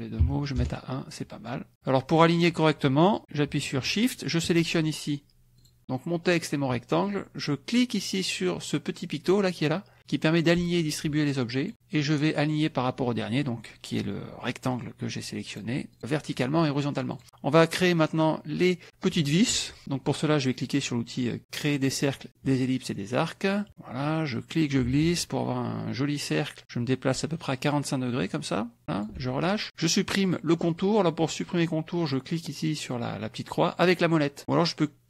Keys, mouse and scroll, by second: 0.6 KP_Enter, 4.3 shift+click, 5.6 click, 11.6 click, 15.5 click, 16.6 click, 21.9 click, 22.3 middle click, 23.1 middle click, 23.7 middle click, 24.4-29.2 drag.